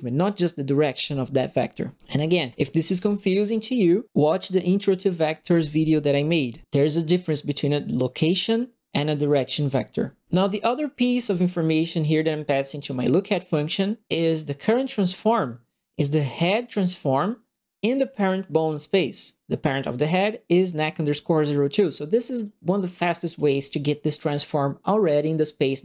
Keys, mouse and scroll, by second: 2.8 Delete, 11.2 right click, 22.4 click, 23.2 click.